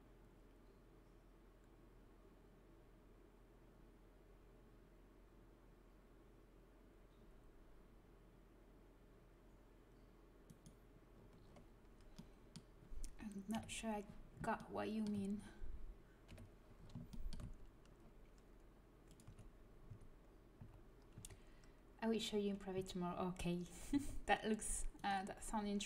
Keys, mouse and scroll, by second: 10.4 right click, 11.1 middle click, 13.5 KP_1, 16.2 KP_1, 19.2 a, 19.8 a, 20.5 z, 21.1 a, 23.9 c, 25.2 click, 25.4 g.